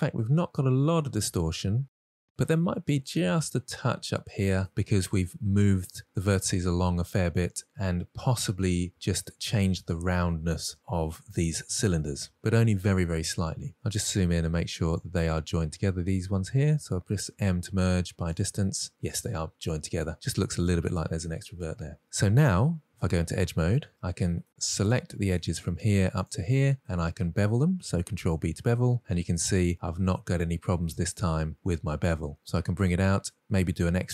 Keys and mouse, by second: 3.0-3.8 middle drag, 5.2-5.6 middle drag, 14.4 middle drag, 15.5 click, 17.6 m, 20.3 middle click, 21.7-22.2 middle drag, 23.5 2, 23.9 ctrl+z, 24.6-25.1 middle drag, 25.6 click, 26.1-26.5 middle drag, 27.3-27.6 middle drag, 28.9 ctrl+b.